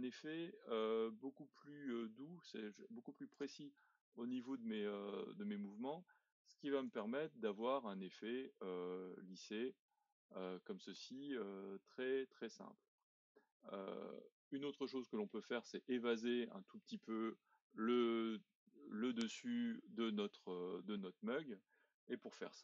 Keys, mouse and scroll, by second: 4.1-6.9 middle drag, 6.9 Tab, 7.6-9.6 middle drag, 9.6-10.4 scroll down 2, 10.4-11.4 middle drag, 11.4-11.9 scroll up 1, 11.9-13.5 middle drag, 13.5-14.0 scroll up 1, 14.0-18.4 middle drag, 19.3-22.5 middle drag, 22.5-22.6 scroll down 1.